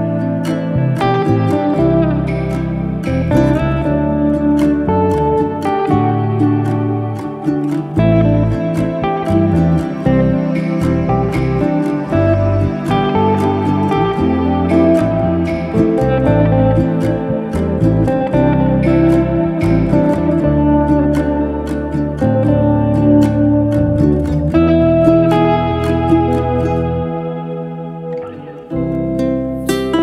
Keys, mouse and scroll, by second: 0.3 g, 1.0-1.9 shift+middle drag, 1.9 s, 7.6-7.9 scroll up 2, 7.9 middle click, 8.8 Tab, 8.9 middle click, 9.3 e, 11.5 Tab, 11.7 scroll down 3, 11.9-12.5 middle drag, 12.5-13.0 scroll up 2, 13.0 Tab, 13.1-13.5 middle drag, 13.5 click, 14.5 ctrl+b, 17.0 click, 17.6 g, 18.6-19.3 middle drag, 19.3 click, 19.8 2, 19.9 click, 20.4 ctrl+b, 21.6-22.6 middle drag, 22.6 click, 23.5 1, 24.0 click, 24.8 ctrl+b, 25.7 click, 26.2 g, 27.0-27.9 middle drag, 27.9 2, 28.1 click, 28.7 ctrl+b, 29.7-30.0 middle drag.